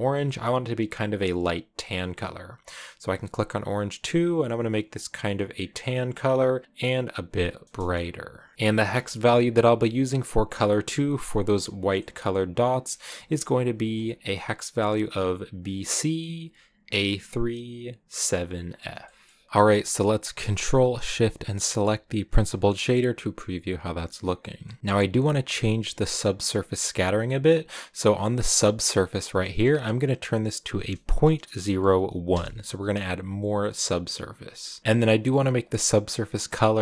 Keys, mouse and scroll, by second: 1.9-2.4 scroll up 1, 4.0 click, 8.5 ctrl+v, 9.0-13.0 shift+middle drag, 13.0 click, 18.5 scroll down 5, 18.9-22.1 shift+middle drag, 22.1 ctrl+shift+click, 24.8 scroll up 1, 32.2 click.